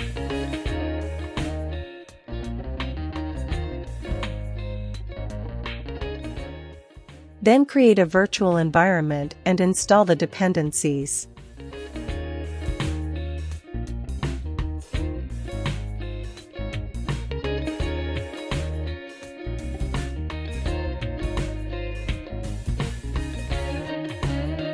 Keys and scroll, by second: 0.6 ctrl+l, 0.7-3.1 typing, 3.2 Tab, 4.2 Return, 4.9 ctrl+l, 5.0-5.8 typing, 12.1 super+c, 12.3 super+c, 12.7 super+v, 13.1 Return, 13.8 BackSpace, 14.9-18.1 typing, 19.2 Return, 22.5 ctrl+l, 22.7-24.7 typing.